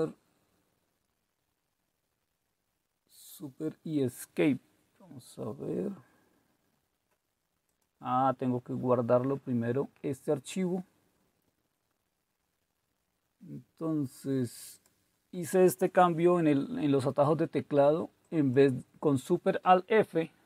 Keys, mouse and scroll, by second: 3.7-4.5 scroll up 1, 4.5-5.6 scroll up 1, 5.6-7.6 scroll up 1, 7.6-9.3 scroll up 1, 9.3-13.4 scroll up 1, 13.4-14.6 scroll up 1, 14.6 scroll up 1, 14.7 click, 18.2 click.